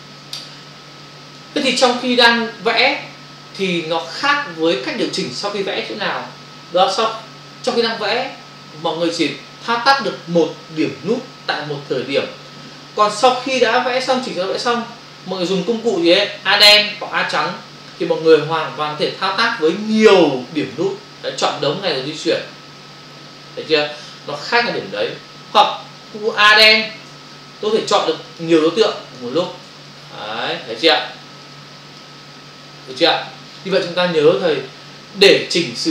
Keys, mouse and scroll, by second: 0.2 space, 13.4 ctrl+click, 14.1 v, 15.5 click, 19.8 click, 22.3 click, 25.6 click, 25.7 click, 26.6 a, 28.3 click, 28.4 click, 29.3 shift+click, 29.5 shift+click, 29.8 click, 31.5 click, 32.4 click.